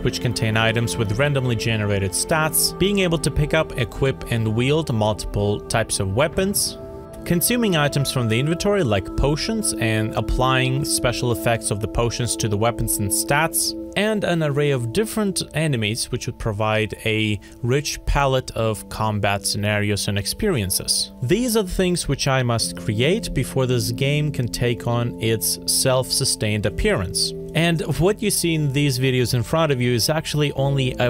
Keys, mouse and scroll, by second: 16.6 alt+F4.